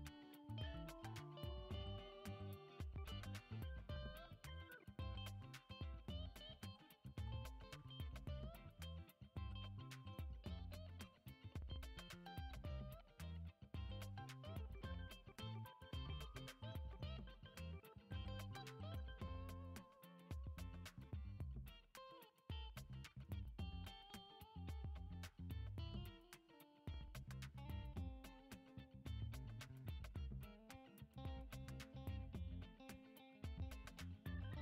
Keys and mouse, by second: 0.9-2.0 drag, 4.4 ctrl+Tab, 5.6 click, 6.3 ctrl+Tab, 8.2 click, 8.7 click, 8.9 click, 9.5 middle click, 10.2 g, 12.5 click, 13.1 middle click, 13.6 click, 13.8 middle click, 15.3 shift+d, 17.0 click, 17.9 ctrl+j, 19.4-19.9 middle drag, 20.2 middle click, 20.9-21.4 shift+middle drag, 22.2 F6, 22.6 shift+a, 22.7 shift+a, 24.6 s, 25.8 s, 27.9 s, 29.0 g, 30.6 shift+middle drag, 31.5 Tab, 32.0 ctrl+r, 33.3 ctrl+b.